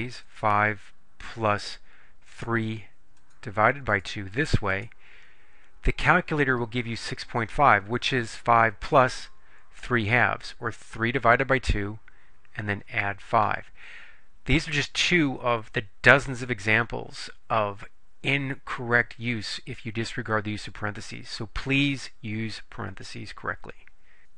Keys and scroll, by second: 0.3 5, 2.4 3, 3.3 /, 4.0 2, 4.8 Return.